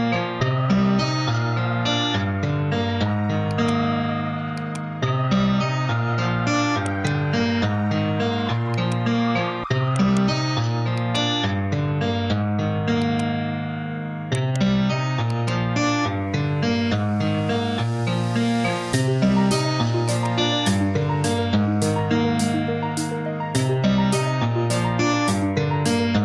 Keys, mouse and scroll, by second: 1.1 ctrl+z, 3.5-6.3 drag, 6.3 Tab, 6.8 right click, 7.2 Tab, 8.7 click, 10.0 right click, 11.0-13.0 drag, 14.4 right click, 15.2-17.2 drag, 17.2 Tab, 18.6 h, 19.8 click.